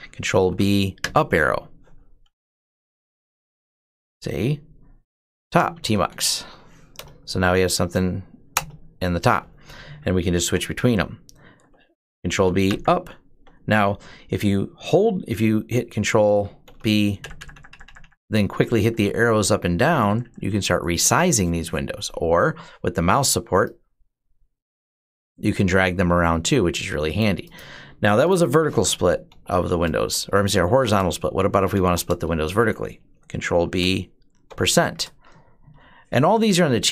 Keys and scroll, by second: 0.0-3.2 typing, 3.3 Tab, 5.0-6.8 typing, 8.4 Return, 9.3-10.1 typing, 10.2 ctrl+b, 10.5 Down, 11.2-13.0 typing, 16.5 ctrl+b, 17.0 ctrl+Up, 17.2 ctrl+Up, 17.3 ctrl+Up, 17.5 ctrl+Up, 17.7 ctrl+Up, 17.8 ctrl+Up, 18.0 ctrl+Up, 18.4 ctrl+Down, 18.6 ctrl+Down, 18.7 ctrl+Down, 18.9 ctrl+Down, 19.0 ctrl+Down, 19.2 ctrl+Down, 19.4 ctrl+Down, 19.7 ctrl+Up, 19.9 ctrl+Up, 20.1 ctrl+Up, 20.3 ctrl+Up, 20.3 ctrl+Up, 20.5 ctrl+Up, 28.5-32.3 typing, 33.2 ctrl+b, 34.3 shift+5.